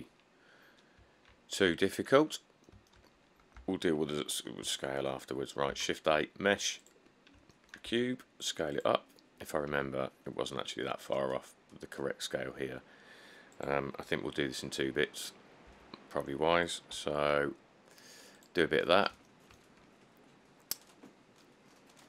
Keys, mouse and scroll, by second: 0.0-1.0 scroll, 2.4 middle click, 2.4 middle click, 2.5 middle click, 3.6 middle click, 3.8 1, 4.3 middle click, 4.7 middle click, 4.8 scroll, 5.9 a, 8.1 s, 10.0 s, 15.9 s, 17.1 g, 19.0 click, 19.0 click, 19.1 middle click.